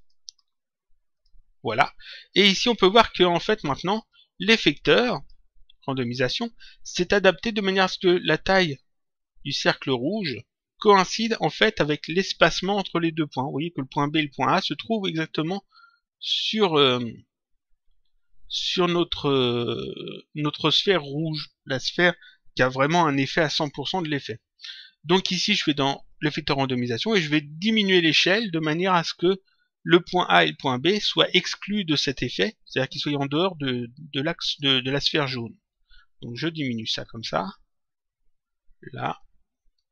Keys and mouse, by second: 1.0 click, 2.2 click, 4.0 click, 26.0 click, 36.3 click.